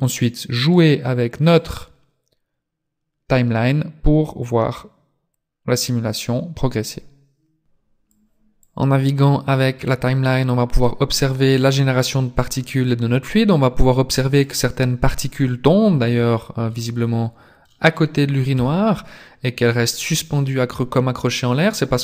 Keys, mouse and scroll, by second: 1.6 click, 8.6 click, 16.3-16.7 scroll up 1, 16.7 middle click, 18.5 KP_3.